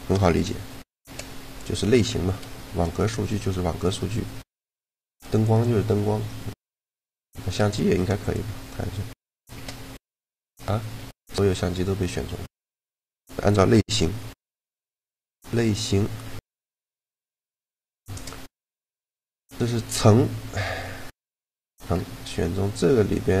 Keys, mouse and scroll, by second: 0.6 shift+g, 3.1 g, 4.2-5.6 right drag, 4.7 g, 7.5 shift+d, 9.1 shift+g, 10.7 g, 12.5 a, 17.5 shift+g, 21.7-23.4 middle drag.